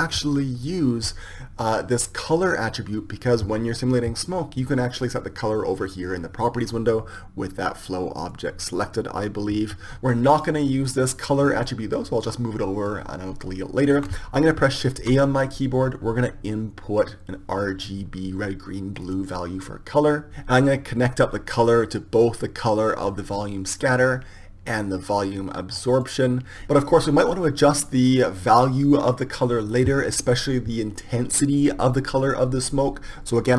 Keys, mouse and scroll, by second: 1.9-3.8 right drag, 3.2-5.1 drag, 9.0 right click, 10.3-12.8 right drag, 10.8-12.5 drag, 15.0 shift+a, 21.9-23.9 drag, 24.3-26.2 drag.